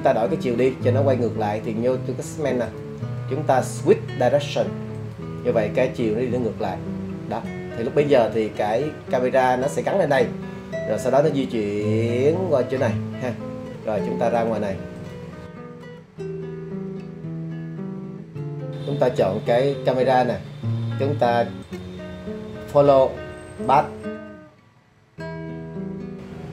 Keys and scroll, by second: 24.3 shift+Home.